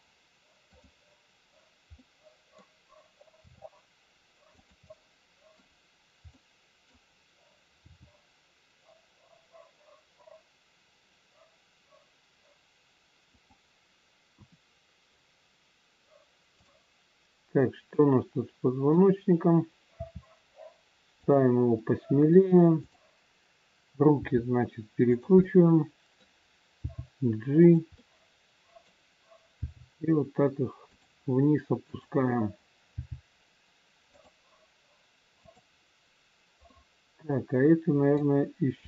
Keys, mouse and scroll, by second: 0.6 click, 2.0 middle click, 3.3 r, 4.8 middle click, 6.5 middle click, 7.8 g, 14.3 KP_1, 14.9-15.9 scroll down 1, 16.5 click, 16.5-17.4 scroll down 1, 18.0 middle click, 20.0 r, 21.7 middle click, 22.7 click, 24.1 r, 25.3 middle click, 26.8 g, 28.0 middle click, 29.6 g, 31.8 click, 33.0 g, 35.4 click, 36.6 middle click.